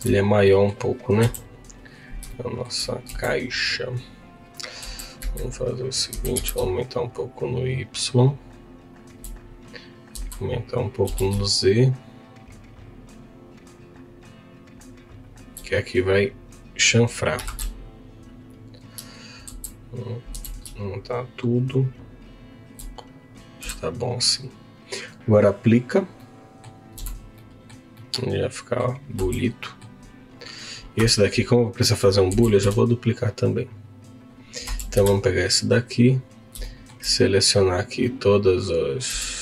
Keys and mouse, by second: 0.4 middle click, 1.2 KP_1, 2.2 shift+middle click, 3.0 z, 4.8 Tab, 5.2 a, 6.1 s, 6.3 x, 10.1 s, 11.0 z, 20.3 s, 22.5 shift+click, 23.6 Tab, 25.3 click, 26.3 middle click, 26.9 z, 27.3 middle click, 27.9 middle click, 29.2 Tab, 29.6 middle click, 31.0 Tab, 32.4 shift+d, 32.6 y, 33.7 click, 34.2 click, 34.7 Tab, 34.9 2, 36.6 shift+middle click, 39.0 q.